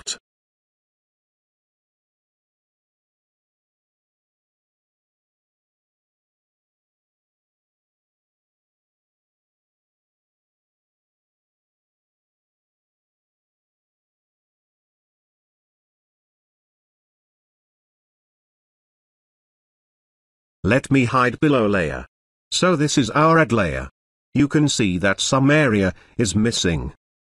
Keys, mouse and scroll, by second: 0.9-1.4 typing, 2.4-7.5 drag, 8.0-12.4 drag, 12.6 space, 12.8-13.8 ctrl+drag, 19.3 click, 19.3 click, 22.5 click, 22.6 alt+click, 24.8 space, 25.2-26.1 ctrl+drag.